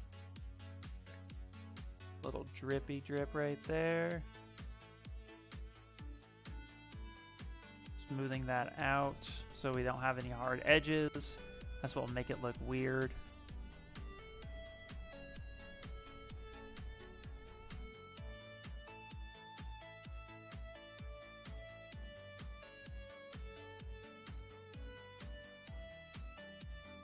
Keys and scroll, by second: 3.8 s, 5.0 s, 9.5 s, 12.2 ctrl+z, 22.8 s, 25.5 s.